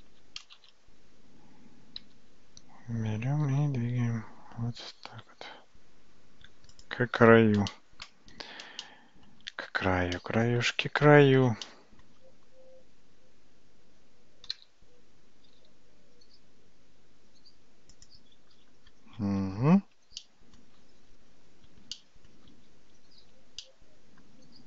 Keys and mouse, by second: 0.2 alt+z, 0.8 shift+z, 2.0 g, 7.8-8.1 shift+middle drag, 8.8-9.4 shift+middle drag, 10.2-10.6 shift+middle drag, 11.7-12.1 shift+middle drag, 14.6 g, 20.2-20.6 shift+middle drag, 22.0-22.4 shift+middle drag, 23.6-24.3 shift+middle drag.